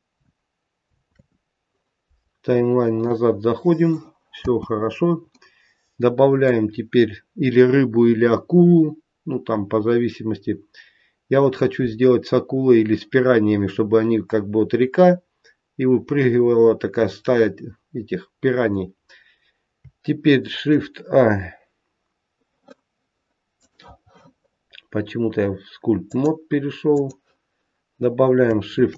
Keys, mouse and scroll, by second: 1.2 ctrl+Tab, 2.5-2.9 scroll up 4, 3.0 middle click, 4.6 space, 5.4 middle click, 20.5 shift+a, 26.3 click, 28.7 shift+a.